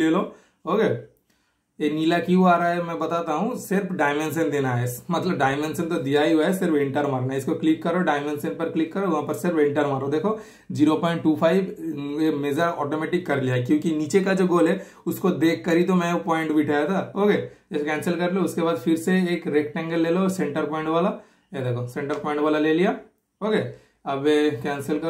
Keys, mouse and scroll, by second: 1.0 super+click, 3.6 super+click, 6.0 super+right click, 6.6 super+click, 7.6 super+click, 8.6 super+click, 11.1 super+Return, 12.0 super+Return, 12.6 super+click, 13.2 super+Return, 13.8 super+click, 14.4 super+Return, 14.9 super+click, 15.5 super+Return, 15.8 super+scroll down 1, 16.0 scroll up 2, 17.2 super+right click, 17.6 super+click, 18.4-19.7 typing, 19.2 super+click, 20.7 super+click, 23.9 super+click, 24.8 super+right click.